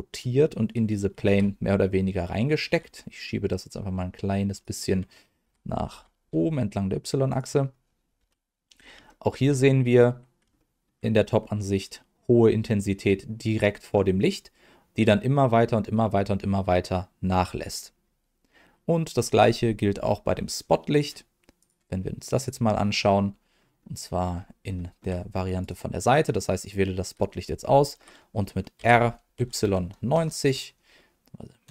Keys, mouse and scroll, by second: 1.2 g, 2.6 y, 4.5 click, 5.4 g, 5.9 y, 7.3 click, 8.2 KP_7, 9.0 shift+middle click, 11.4 scroll up 1, 18.0-20.9 scroll down 1, 20.9 click, 21.6 click, 22.3 click, 23.3-23.7 scroll down 2, 23.7 middle click, 24.3 scroll down 1, 24.7 shift+middle click, 25.6 click, 26.3 middle click, 28.7 r, 29.3 y, 29.6 KP_9, 30.1 KP_0, 31.6 KP_Subtract.